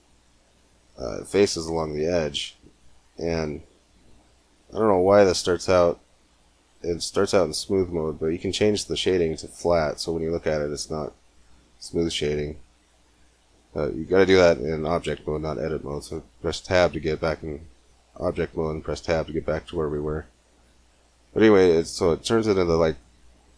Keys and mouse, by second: 2.6-4.5 drag, 4.8 middle click, 5.6 Tab, 5.6-6.6 drag, 7.2-8.8 drag, 9.7-10.8 drag, 12.6 middle click, 12.8 Tab, 13.6 Tab, 18.6 Tab, 19.2 click.